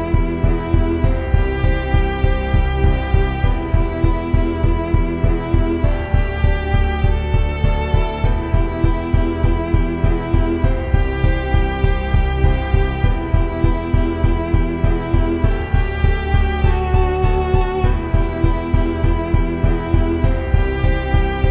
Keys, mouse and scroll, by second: 0.5-1.6 drag, 2.6 Tab, 2.7 s, 3.2 click, 3.8 Tab, 4.4-5.6 drag, 6.5 click, 6.8 middle click, 7.6 click, 8.0-9.7 drag, 9.9-11.1 drag, 11.6-13.0 drag, 13.0 middle click, 13.6 Tab, 14.0 Tab, 15.2-18.1 drag, 19.8 t, 20.5-21.5 drag.